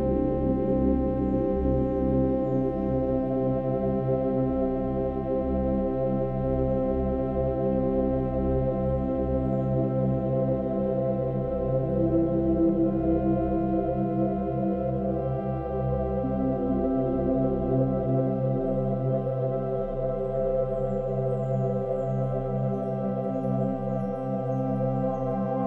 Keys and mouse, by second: 0.5-2.0 drag, 2.7-3.4 drag, 5.9-6.6 drag, 7.5 click, 9.3 click, 10.3-13.6 alt+drag, 13.8-15.6 drag, 15.7-18.8 alt+drag, 19.5 click, 21.1 click, 23.2 click.